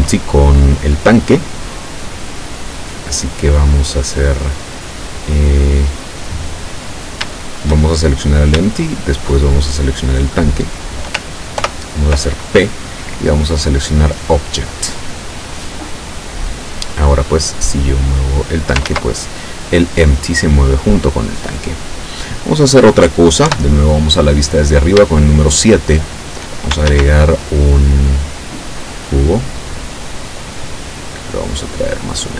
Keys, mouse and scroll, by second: 9.5 shift+right click, 11.7 ctrl+p, 14.8 click, 16.1 right click, 17.7-18.7 drag, 18.9 ctrl+z, 23.6 KP_7, 25.4-26.5 shift+middle drag, 26.9 shift+a, 29.3 click, 31.0-32.3 drag.